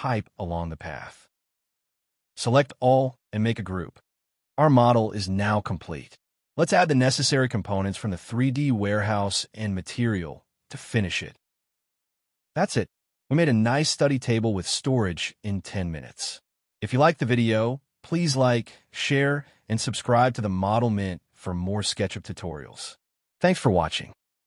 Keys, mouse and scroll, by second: 0.0 middle click, 0.1 scroll down 1, 0.2 middle click, 0.3 scroll up 1, 0.4 shift+middle click, 0.9 scroll down 1, 1.0 middle click, 1.5 g, 1.7 middle click, 1.9 scroll up 1, 2.2 m, 2.9 space, 3.0 middle click, 3.7 space, 3.8 scroll up 1, 9.0-9.7 scroll down 1, 10.4-10.9 scroll up 1, 12.4 space, 13.1-13.8 scroll down 1, 15.7 space, 17.9 space, 18.2 double click, 18.8 space, 18.9 Escape, 20.3 shift+middle click.